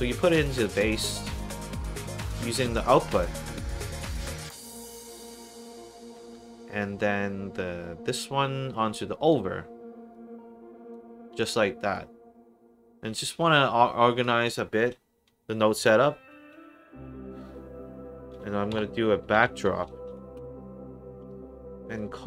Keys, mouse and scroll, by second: 5.3 click, 6.5 click, 7.5-8.6 drag, 10.0 click, 11.4 middle click, 13.3 click, 15.8 Tab, 18.3-20.0 typing, 20.1 Down, 20.3 Return, 21.9 click.